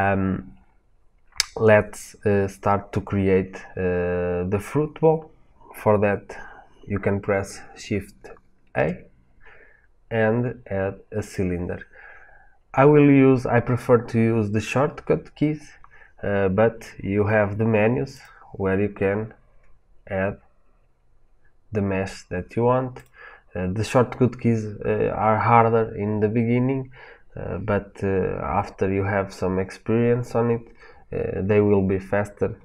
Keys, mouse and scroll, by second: 8.6 shift+a, 18.0-32.6 drag.